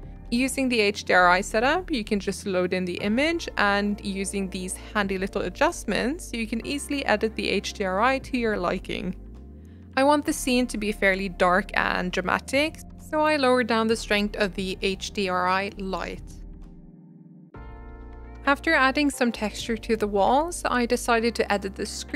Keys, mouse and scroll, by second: 0.0-8.9 drag, 9.7-13.9 shift+drag, 15.6 middle click, 16.2-16.8 scroll up 2, 16.5 middle click, 16.8 middle click, 17.5 g, 18.1 click, 20.0-22.1 shift+drag.